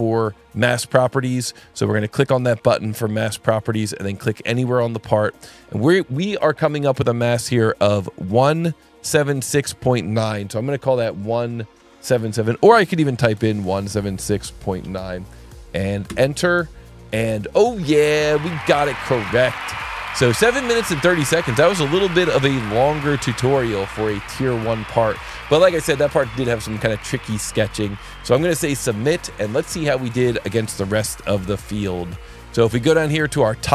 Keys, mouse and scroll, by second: 1.7 alt+1, 2.8 click, 4.6 click, 11.7 click, 13.4-14.8 typing, 16.1 KP_Enter, 17.9 click, 23.1 click.